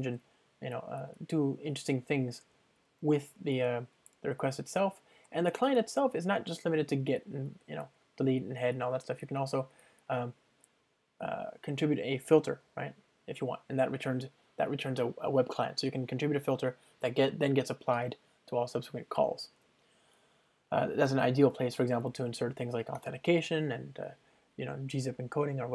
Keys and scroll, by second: 0.1 super+BackSpace, 19.5 super+BackSpace, 22.1 super+BackSpace.